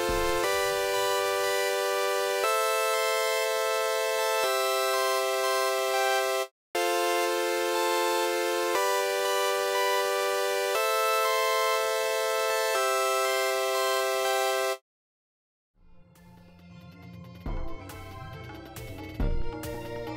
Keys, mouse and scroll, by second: 6.4 space, 14.7 space, 15.8 click, 17.0-18.0 drag, 18.2 click, 19.0 click.